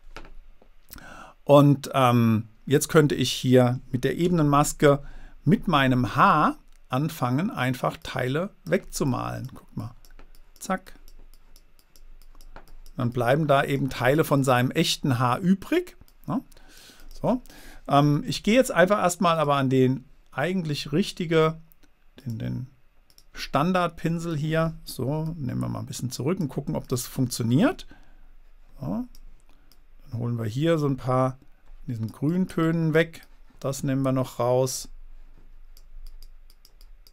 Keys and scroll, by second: 4.6 b.